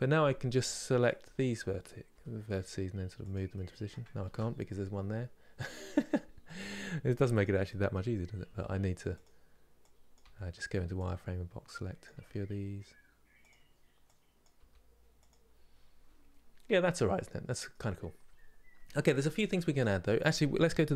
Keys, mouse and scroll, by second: 1.0 click, 1.8 g, 3.2 middle click, 3.9 ctrl+z, 5.7 click, 6.1 middle click, 7.1 click, 7.3 middle click, 8.1 g, 9.8 click, 9.9 g, 11.7 click, 11.8 g, 14.1 click, 14.3 g, 16.5-19.4 middle drag, 19.4 Tab.